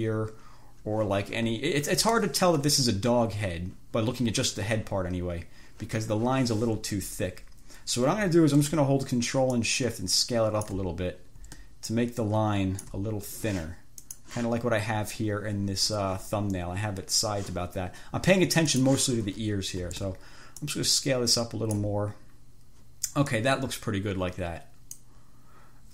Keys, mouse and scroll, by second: 1.9 ctrl+scroll down 2, 2.4 ctrl+click, 2.8 ctrl+1, 9.7-11.1 ctrl+shift+scroll up 2, 12.1-13.4 ctrl+shift+drag, 14.3 click, 19.1 click, 20.9-22.3 ctrl+shift+drag, 23.6-25.5 drag.